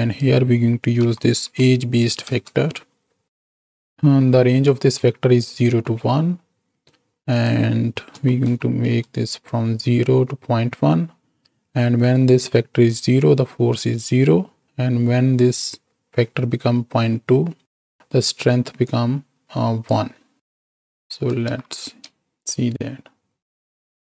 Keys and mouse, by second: 4.0 ctrl+h, 4.5 click, 5.9 middle click, 7.2-8.9 drag, 18.7-19.9 drag, 20.3 click, 21.3 shift+Right, 21.5 shift+Left, 22.1 space.